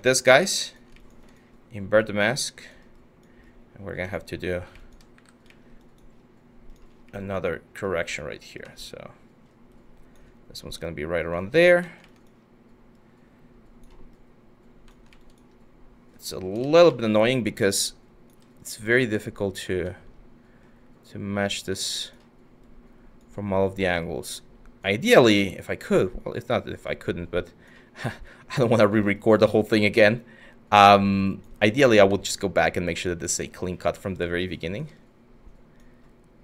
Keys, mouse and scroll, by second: 4.7 w, 16.2 ctrl+z.